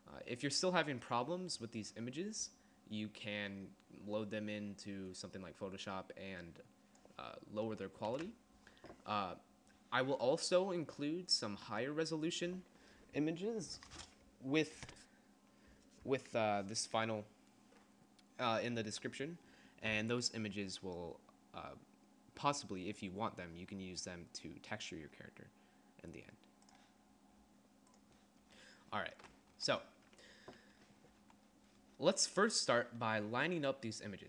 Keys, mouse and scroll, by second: 8.3 ctrl+z, 29.5 z, 31.2 z.